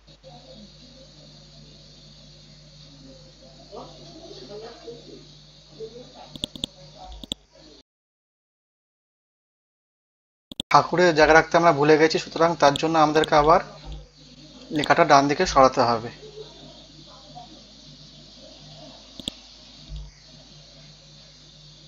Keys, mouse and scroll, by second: 0.1-0.6 scroll down 1, 2.3-3.3 scroll up 1, 3.9 scroll down 1, 6.3 click, 8.3 scroll up 1, 10.5 click, 11.5 ctrl+z, 12.1 scroll down 1, 12.7 click, 13.1 alt+click, 14.7-16.7 drag, 16.7 scroll up 1, 17.5 scroll up 1, 19.2-21.8 drag.